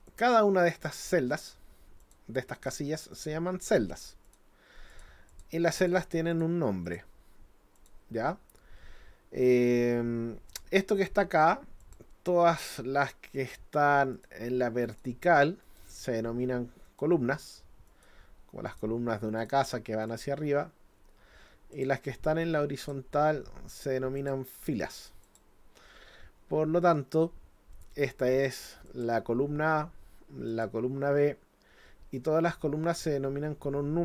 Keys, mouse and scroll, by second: 0.1 click, 0.7 click, 1.3 click, 2.0 click, 2.6 click, 3.1 click, 3.7 click, 4.3 click, 4.9 click, 5.3 click, 5.8 click, 6.3 click, 6.9 click, 7.8 click, 11.8 click, 12.6 click, 13.4 click, 14.1 click, 14.9 click, 15.6 click, 16.9 click, 17.9 click, 18.7 click, 19.4 click, 20.1 click, 21.7 click, 22.8 click, 24.2 click, 25.2 click, 28.9 click, 30.5 click, 32.1-34.0 drag.